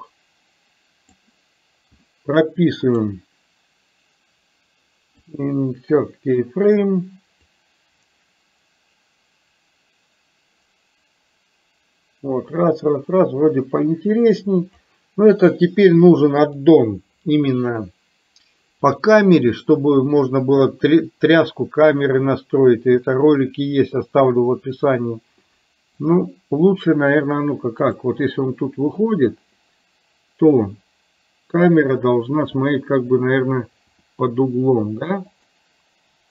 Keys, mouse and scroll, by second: 3.0-5.7 right drag, 7.5-15.0 drag, 16.5 click, 18.9-19.8 drag, 26.0 click, 28.0 click, 34.0 r.